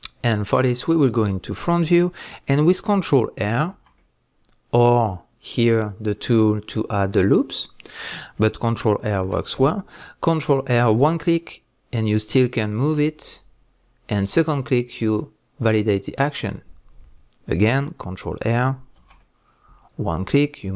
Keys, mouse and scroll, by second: 3.7 ctrl+r, 4.8 right click, 16.4 click, 19.0 ctrl+r.